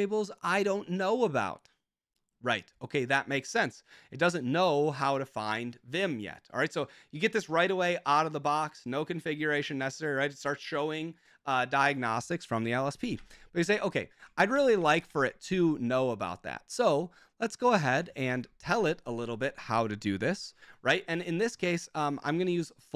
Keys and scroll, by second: 13.2 super+j, 14.4 ctrl+shift+Tab, 14.5 ctrl+shift+Tab, 14.6 ctrl+shift+Tab, 14.7 ctrl+shift+Tab, 15.6 ctrl+shift+Tab, 17.9 ctrl+Tab, 18.2 ctrl+Tab.